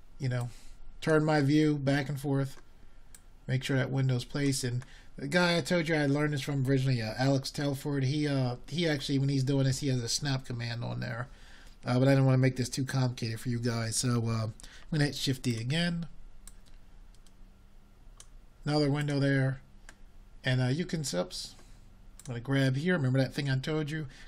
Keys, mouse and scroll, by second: 0.0-2.9 middle drag, 2.9 shift+d, 9.8 r, 12.3-24.2 drag.